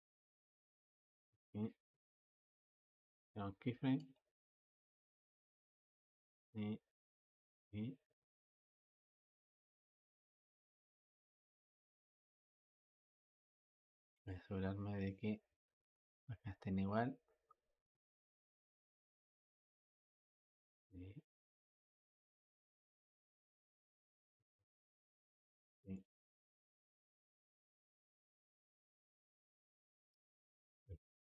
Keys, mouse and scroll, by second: 3.8-14.1 drag, 19.0-22.0 drag, 24.7-25.8 drag, 25.8-27.3 middle drag, 27.3 click, 30.1 ctrl+z, 30.8 click.